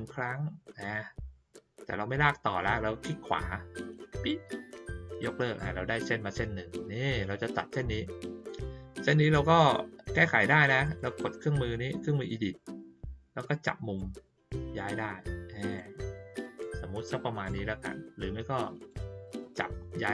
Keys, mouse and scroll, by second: 4.1 right click, 10.8 click, 13.9-15.7 drag, 18.7 click.